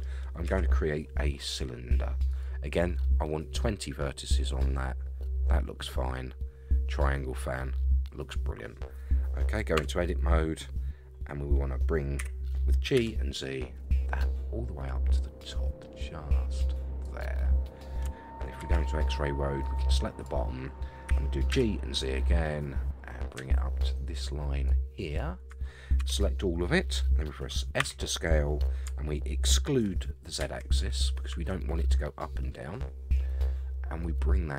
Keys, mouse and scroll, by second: 0.4 shift+a, 9.8 Tab, 11.3-12.2 scroll up 3, 12.2 g, 18.6 alt+z, 19.6 click, 21.0 g, 26.0 a, 27.8 s.